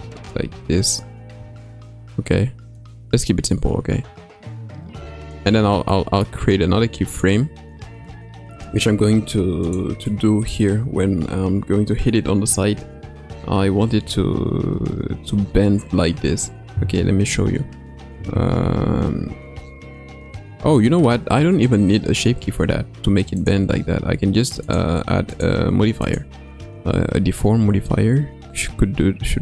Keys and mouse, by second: 0.0 ctrl+z, 0.6 ctrl+z, 1.4 Tab, 2.8-5.9 drag, 5.9 middle click, 7.2 click, 8.1-8.6 middle drag, 9.7 click, 10.1-10.6 middle drag, 12.7 Tab, 20.6 Tab, 23.4 click, 25.5-29.4 drag.